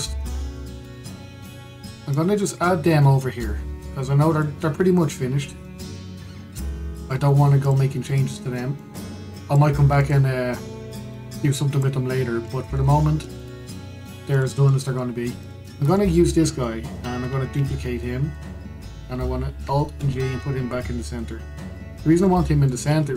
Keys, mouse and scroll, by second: 0.4-0.7 scroll down 1, 0.7-2.8 shift+middle drag, 2.8 click, 5.4-6.8 middle drag, 6.8-7.7 scroll down 1, 7.7 click, 7.9-8.3 scroll up 1, 8.3 click, 9.5 click, 10.7 click, 11.8 click, 12.8-13.2 scroll, 13.2-15.0 middle drag, 15.0 click, 15.4-16.1 middle drag, 16.1 click, 16.6-18.2 shift+middle drag, 18.2 shift+d, 20.6 alt+g, 22.3-22.9 scroll down 2, 22.9-23.1 middle drag.